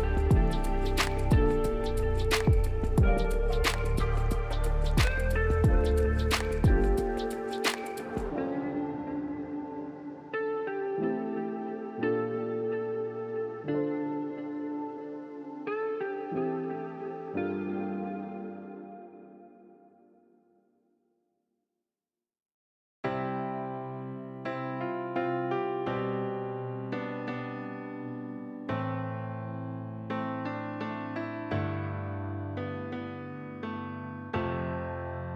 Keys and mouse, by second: 0.3 Tab, 1.1 /, 1.7 Tab, 2.0 Tab, 2.3 alt+z, 2.5 click, 2.9 click, 3.4 click, 3.8 x, 4.2 Tab, 4.6 alt+click, 5.3 ctrl+z, 5.7 ctrl+z, 6.1 click, 6.3 click, 6.7 click, 7.3 x, 7.8 Tab, 8.1 alt+click, 8.8 alt+z, 9.1 drag, 9.9-10.5 drag, 11.0 click, 11.2 click, 12.0-12.6 drag, 13.2 click, 14.1 click, 14.4 click, 15.0 click, 16.0-16.3 alt+drag, 16.7 /, 17.2 alt+drag, 18.1 alt+drag, 18.4 s, 19.2-20.1 alt+drag, 20.3 click, 20.6 click, 21.3 s, 22.1 click, 22.6 click, 23.7 click, 24.1 r, 25.0 alt+middle drag, 26.6 click, 27.3 z, 30.6 click, 31.6 click, 33.1 n, 33.4 n, 33.8 t, 34.4 click, 34.9 click.